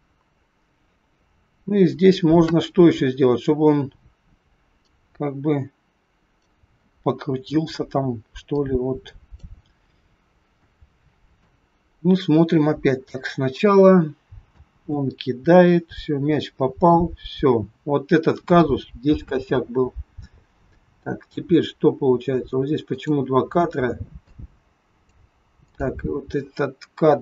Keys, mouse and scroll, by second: 4.8 click, 8.5 click, 9.8-10.5 scroll down 6, 10.5 shift+middle click, 11.5-11.9 scroll up 2, 13.2 click, 14.5 space, 19.3 space, 22.9 click, 24.3 click.